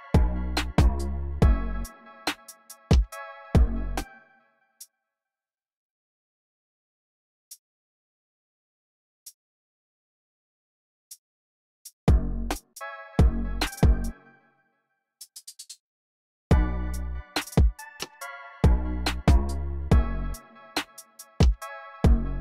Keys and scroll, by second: 1.2 e, 3.7 space, 5.8-6.7 typing, 8.4 super+z, 10.4 typing, 12.2 space, 13.9 space, 15.1 alt+Page_Down, 15.2 alt+Page_Down, 16.3 space.